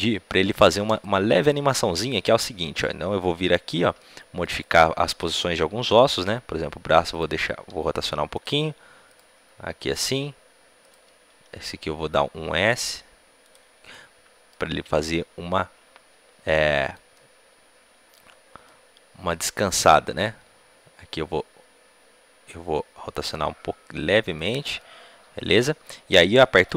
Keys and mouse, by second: 0.0-4.5 middle drag, 4.5-6.2 right drag, 6.2 r, 7.6-12.7 right drag, 7.6 r, 9.0-11.6 drag, 9.3 r, 11.3 s, 11.6 middle click, 12.4 middle click, 13.8-16.4 drag, 16.4 middle click, 19.7-22.5 right drag, 20.2 g.